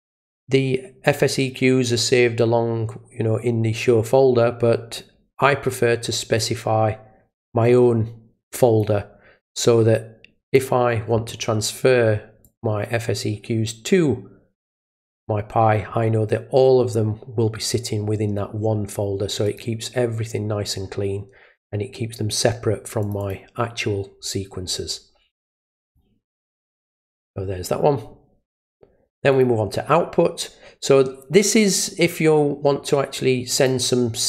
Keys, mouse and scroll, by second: 6.4-8.8 drag, 10.4 click, 12.4 click, 14.7 click, 14.9 click, 19.5 click, 23.0 click, 23.2 click, 24.7-25.0 scroll down 1, 25.8 click, 29.3 click, 33.6 click.